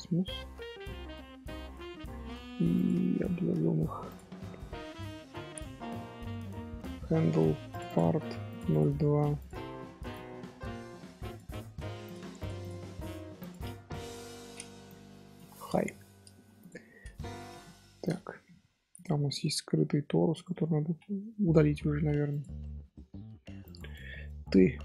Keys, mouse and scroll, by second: 0.8-2.7 middle drag, 2.7 click, 4.0-5.6 drag, 5.6 scroll down 1, 5.8 scroll up 1, 6.4-7.7 scroll down 1, 7.7 click, 7.8 click, 8.7 click, 9.3-12.1 drag, 12.4 click, 12.6 click, 13.4-16.3 drag, 16.5 click, 17.8 scroll down 1, 18.0 click, 18.2-18.5 middle drag, 18.5-18.9 scroll up 1, 18.9 click, 21.6 ctrl+z, 22.6-23.6 shift+middle drag, 23.6 click.